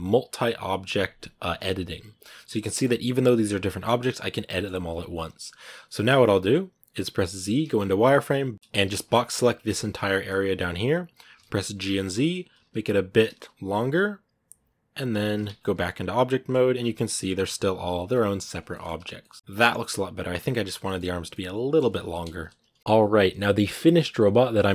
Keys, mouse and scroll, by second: 0.8-1.7 scroll up 1, 1.7-2.3 scroll down 4, 2.3-3.6 middle drag, 3.6 scroll up 2, 3.8-5.1 middle drag, 5.1 KP_1, 7.2 z, 7.4 scroll down 2, 8.5 scroll up 4, 8.6 a, 9.5 scroll down 2, 10.3 b, 12.1 scroll down 2, 12.4 z, 15.3 scroll down 2, 15.4-16.5 middle drag, 16.5 a, 16.6 scroll up 2, 17.0 right click, 17.1 g, 17.9 right click, 18.0 g, 18.5 middle click, 18.8 a, 18.8 scroll down 2, 19.0-22.0 middle drag, 22.0 KP_1, 22.8-24.7 middle drag.